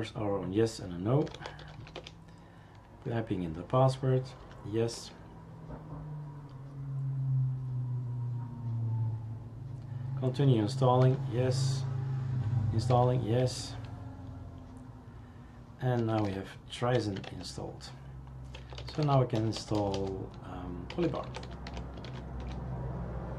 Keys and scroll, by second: 1.0-2.6 typing, 4.4 y, 11.0 y, 13.1-14.1 typing, 16.0 t, 17.6-18.6 typing, 22.4 Return, 22.4 typing.